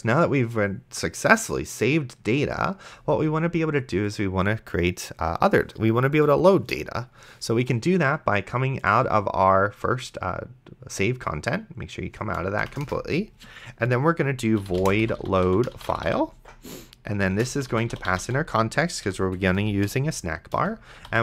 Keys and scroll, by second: 12.8 Return, 14.2-21.2 typing, 19.1 End.